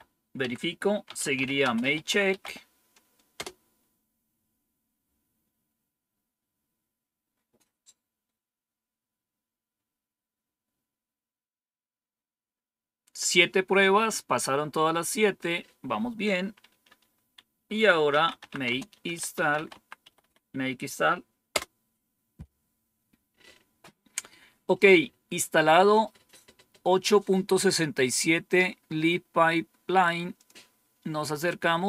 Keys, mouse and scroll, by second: 0.3 Down, 0.7-3.8 typing, 17.8-21.4 typing, 30.3 click.